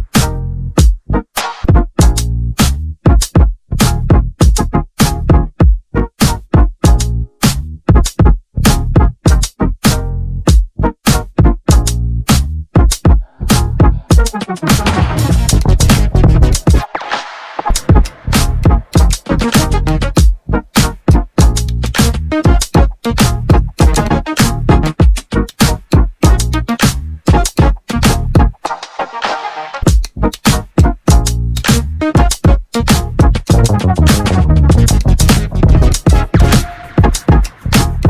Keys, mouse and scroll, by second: 3.5 alt+e, 15.7-18.1 middle drag, 18.1-18.9 scroll down 1, 18.9-19.6 scroll up 1, 19.6-20.5 scroll up 1, 20.5-23.0 middle drag, 26.6-27.1 scroll down 1, 27.1-29.2 middle drag, 29.2 ctrl+r.